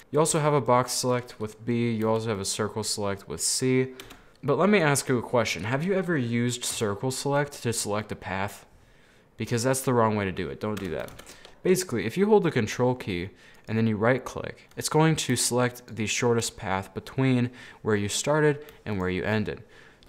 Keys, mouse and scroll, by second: 0.0 middle click, 0.4 b, 2.2 c, 4.3 middle click, 4.7-5.6 scroll down 2, 5.6 scroll up 1, 5.7-6.9 middle drag, 6.9 c, 11.2 ctrl+z, 12.2 right click, 12.3-13.6 middle drag, 13.6 right click, 14.7-15.9 middle drag, 15.9 ctrl+right click, 16.6-19.1 middle drag, 19.1 ctrl+right click, 19.5 middle click.